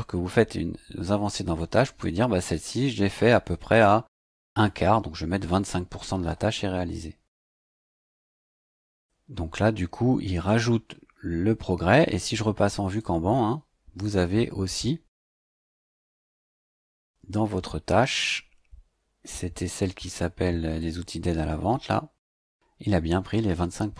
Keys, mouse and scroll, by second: 4.6 KP_2, 4.8 KP_5, 7.4 click, 12.9 click, 20.8 click.